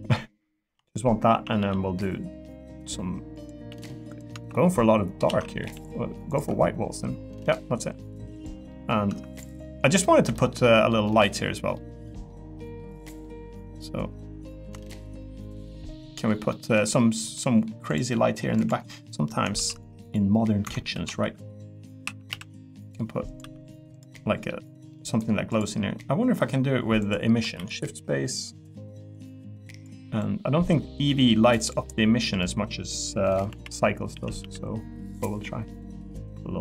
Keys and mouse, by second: 1.3 a, 1.6 g, 3.7 g, 4.1 click, 4.3 Tab, 5.3 ctrl+z, 5.6 g, 6.4 Tab, 7.0 click, 8.3 click, 8.7 middle click, 9.6 middle click, 10.3 shift+middle click, 11.0 middle click, 11.7 middle click, 12.5 middle click, 13.2-14.6 middle drag, 14.8 shift+middle click, 15.2 middle click, 15.9 middle click, 16.5 middle click, 17.3 middle click, 18.1 middle click, 18.9 middle click, 19.5 shift+d, 20.7 Escape, 20.9 s, 21.2 y, 22.3 x, 23.4 e, 24.1 middle click, 24.9 middle click, 25.5 click, 27.0 click, 27.5 shift+d, 28.2 click, 31.8 e, 32.9 click, 33.5 l, 34.1 a, 34.4 g.